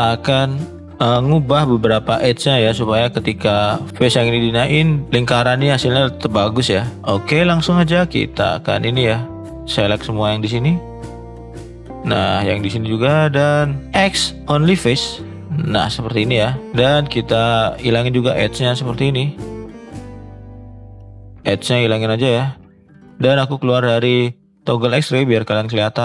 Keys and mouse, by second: 2.8 middle click, 3.6 shift+middle click, 3.9 click, 4.9 middle click, 6.5 ctrl+z, 6.8 middle click, 7.0-7.6 drag, 7.6 middle drag, 9.2-10.6 shift+drag, 10.8 shift+click, 11.3 shift+middle click, 11.7-13.2 shift+drag, 13.9 x, 17.1 click, 17.8 click, 18.2 shift+click, 19.7 shift+click, 20.1 shift+middle click, 20.5 shift+click, 21.1 shift+middle click, 21.3 shift+click, 22.3 shift+middle click, 23.8 click, 25.6 shift+middle click.